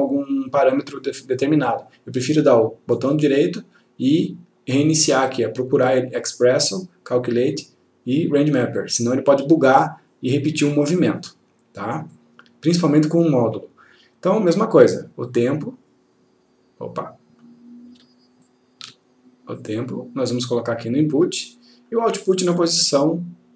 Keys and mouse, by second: 3.1 right click, 9.2 click, 12.2-13.2 click, 15.4-17.6 click, 18.5 click, 23.1-23.5 click.